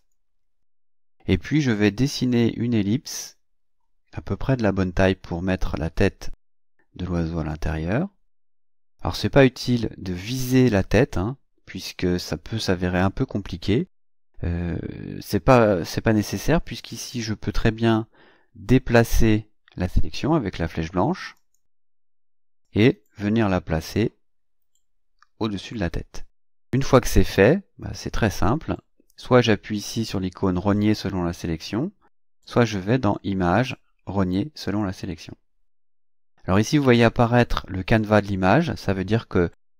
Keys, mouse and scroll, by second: 2.4-7.7 drag, 21.4 click, 22.6-25.9 drag, 32.4 click, 34.6 click.